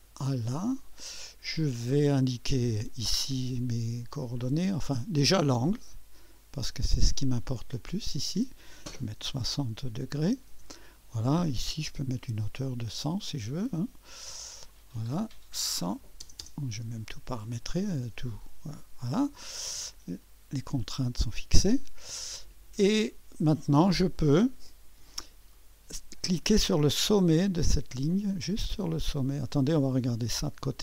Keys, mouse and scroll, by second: 0.0 click, 1.9 click, 5.0 click, 6.3 click, 7.9 click, 8.3-8.7 drag, 9.2 6, 10.0 0, 10.5 Return, 12.1 click, 13.4 click, 14.7-15.9 drag, 15.9-16.4 typing, 17.6 click, 18.7-19.3 scroll down 1, 19.3-20.7 middle drag, 20.7-21.8 drag, 20.7 typing, 22.4 click, 22.9-23.4 typing, 24.1 click, 25.3 click, 25.6 middle click, 26.0 middle click, 27.1 click, 29.1-30.0 drag, 30.3 typing.